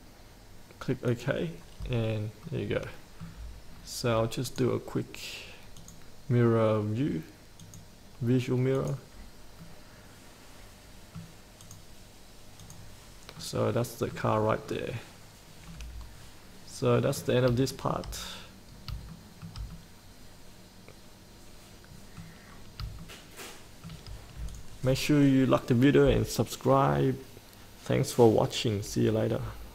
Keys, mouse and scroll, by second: 2.0-2.6 scroll up 1, 2.6 middle click, 3.9-4.6 scroll down 1, 4.6-5.7 drag, 9.8-11.4 middle drag, 11.4-11.9 scroll up 1, 11.9-13.5 drag, 13.5 middle click, 14.7 scroll down 1, 15.8-18.1 middle drag, 18.9 scroll up 1, 19.3 shift+middle click, 19.9-22.7 middle drag, 22.7 scroll down 1, 23.2 shift+middle click, 24.8 click.